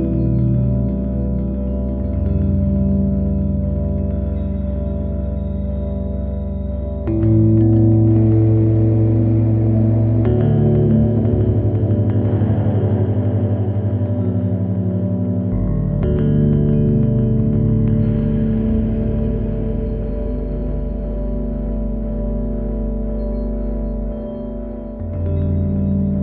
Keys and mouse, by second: 11.0 shift+a, 15.8 click, 17.5-18.8 drag, 20.3-23.2 drag, 25.1 click.